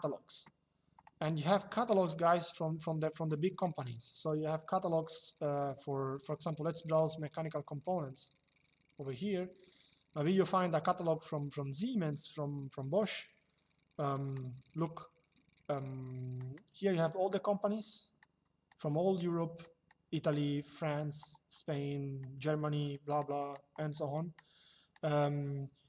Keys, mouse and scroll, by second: 5.8 click.